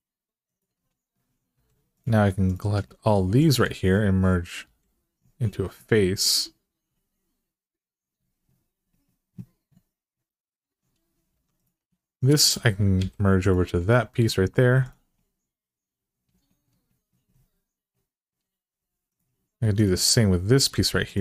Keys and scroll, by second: 1.3 2, 4.4 f, 11.1 1, 12.8 m, 20.5 m.